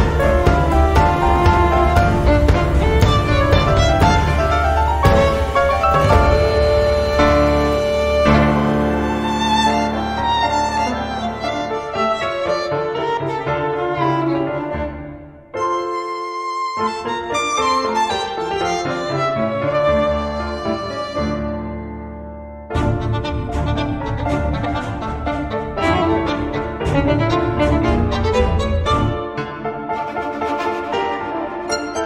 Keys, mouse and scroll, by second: 0.1 click, 1.0 click, 2.3 click, 3.4 click, 5.6 Delete, 7.1-8.3 drag, 9.9 click, 11.3 click, 12.1 click, 13.2 click, 14.7 click, 15.9 click, 17.7 click, 18.5 click, 19.9 click, 21.5 6, 21.9 0, 23.1-24.5 drag, 25.0 click, 26.8 click, 29.4 click, 30.7-32.0 drag.